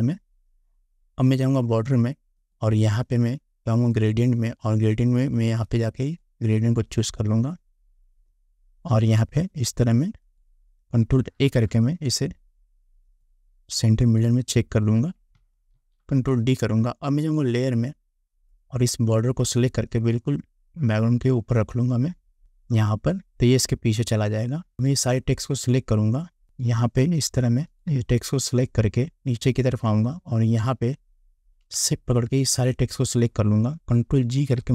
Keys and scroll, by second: 11.5 ctrl+a, 15.9 ctrl+d.